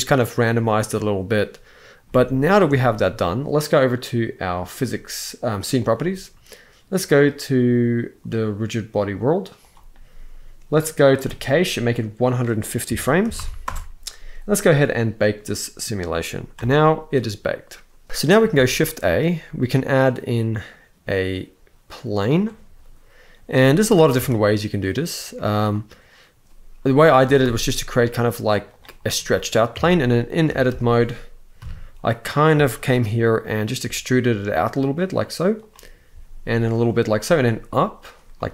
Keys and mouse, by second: 1.7 space, 2.4 shift+middle drag, 9.3 click, 12.0-13.3 drag, 14.9 click, 16.2 space, 18.2 shift+a, 23.5 g, 23.8 z, 26.9 s, 27.1 x, 28.3 click, 28.8 middle click, 29.4 Tab, 30.2 alt+a, 31.3 KP_3, 32.3 shift+middle click, 33.5 e, 35.3 click, 35.8 e, 36.4 click, 36.9 e, 37.7 click, 38.0 middle click.